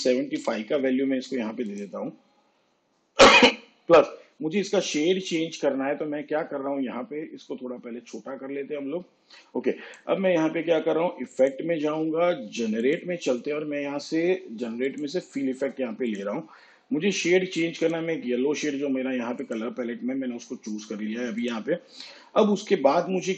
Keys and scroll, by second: 0.4 5.